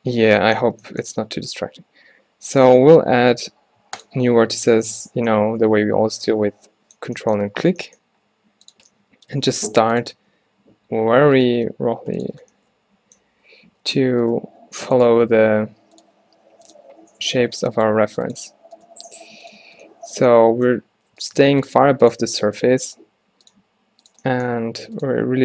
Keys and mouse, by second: 3.0 t, 3.2 z, 4.1 click, 7.8 g, 9.7 r, 11.8 e, 12.6-13.8 drag, 13.8 z, 14.7 e, 15.2 e, 17.1 g, 18.0 e, 18.5 z, 18.9 click, 19.1 g, 21.5 g, 21.9 r, 23.0 e, 23.6 e, 24.6 e, 25.3 e.